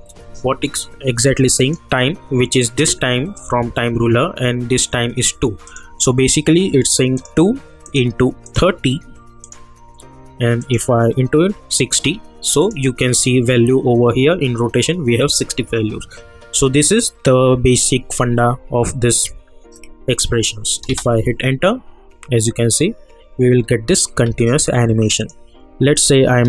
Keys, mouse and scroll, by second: 1.5 click, 5.6 click, 20.8 space, 23.5-24.2 scroll down 1, 24.2 space, 25.2 click.